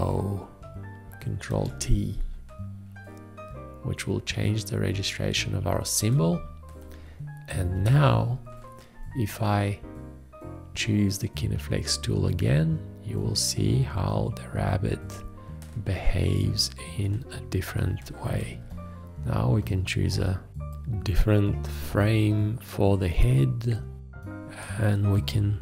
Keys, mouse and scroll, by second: 1.5 ctrl+t, 18.6 shift+., 20.1 shift+..